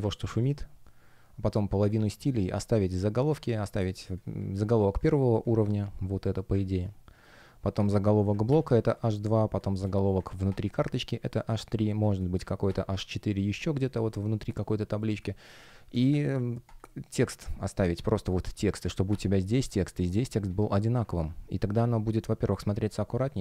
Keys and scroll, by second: 4.8 F1, 5.1 space, 8.8 space, 11.3 space, 14.9 space, 19.4 alt+super+c, 20.3 alt+super+v.